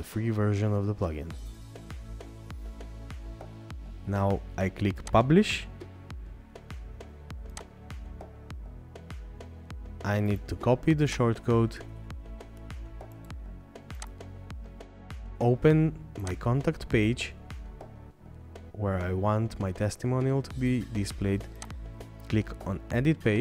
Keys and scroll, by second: 1.6-2.2 scroll up 1.